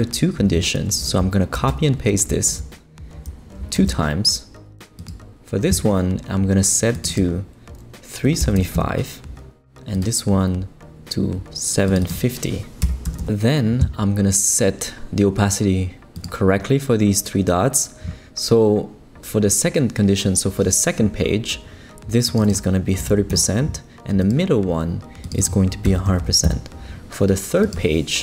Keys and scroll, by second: 1.5 super+c, 2.5 super+v, 3.7 super+v, 8.0-9.0 typing, 12.6-13.7 typing, 22.7-23.6 typing, 25.6-26.5 typing.